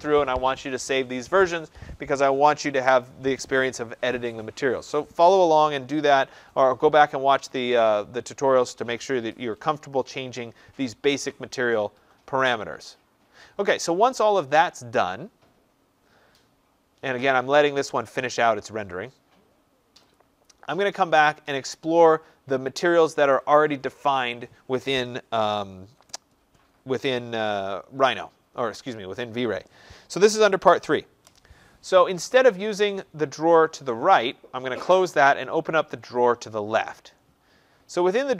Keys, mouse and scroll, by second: 17.8 click, 20.0 click, 34.2 click, 36.0 click.